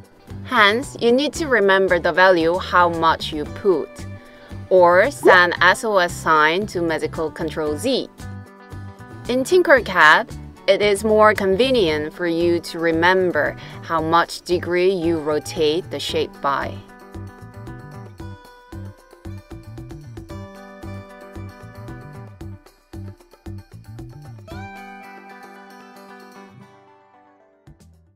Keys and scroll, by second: 3.0 super+z, 4.3 super+z, 10.3 typing, 11.1 Return, 13.3-14.8 typing.